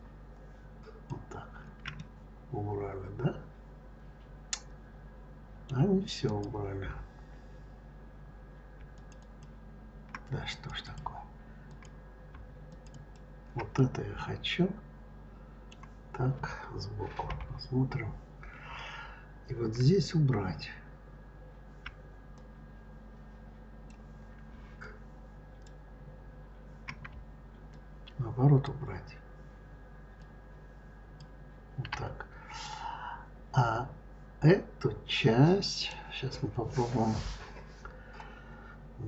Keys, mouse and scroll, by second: 1.8-4.8 middle drag, 6.1 click, 8.7 shift+click, 9.0 shift+click, 10.3 click, 10.7 click, 11.5 click, 12.5 shift+click, 12.7 shift+click, 13.6-16.6 middle drag, 17.1 KP_3, 22.2-24.7 drag, 27.5 ctrl+click, 30.0 ctrl+click, 32.4-35.5 middle drag.